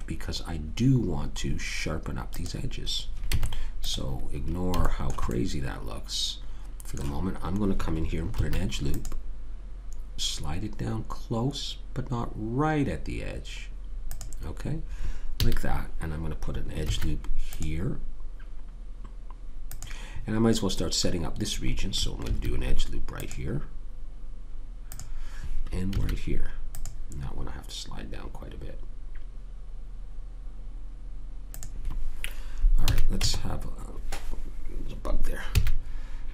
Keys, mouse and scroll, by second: 0.9-2.3 middle drag, 2.3 click, 3.3 Tab, 3.9 Tab, 4.4-5.8 middle drag, 8.3 ctrl+r, 15.4 a, 16.9 ctrl+r, 22.3 ctrl+r, 26.0 ctrl+r, 32.9 a, 33.2 Tab, 35.6 a.